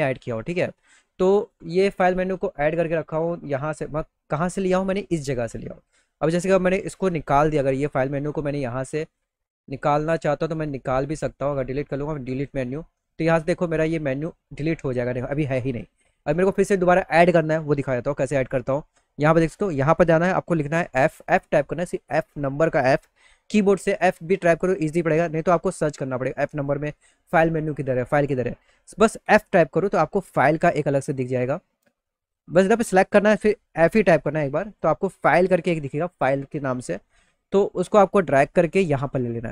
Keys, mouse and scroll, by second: 1.0 click, 7.6 click, 8.7 click, 11.9 click, 18.1 click, 24.6 middle click, 24.8 middle click, 25.1 middle click, 25.3 middle click, 31.9 click, 34.3 click, 37.8-39.5 drag, 38.6 right click.